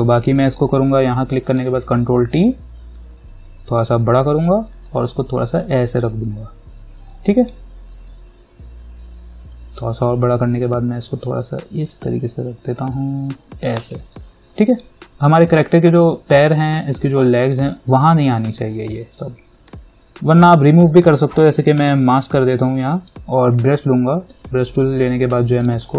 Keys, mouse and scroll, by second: 1.8 ctrl+t, 3.3-9.1 alt+drag, 9.1-14.0 alt+drag, 19.8 click, 22.0 click, 24.0 b, 24.5 b, 25.3-25.9 alt+right drag.